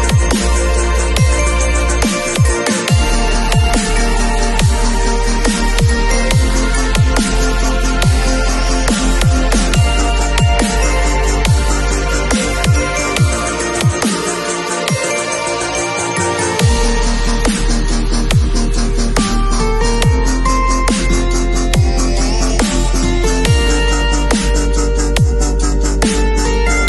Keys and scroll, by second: 7.5 space, 9.9 super+t.